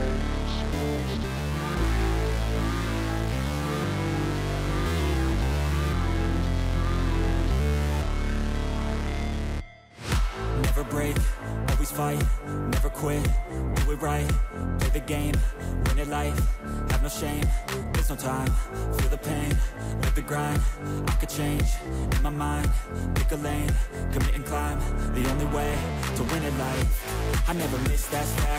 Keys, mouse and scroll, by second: 0.5 right click, 15.4 right click, 19.9 ctrl+z, 21.8 ctrl+z, 23.3 ctrl+-, 23.7 ctrl+-, 25.2 double click, 25.6 double click, 25.9 double click, 26.3 double click, 26.7 double click, 27.0 double click, 27.3 double click, 27.8 double click, 28.3 double click.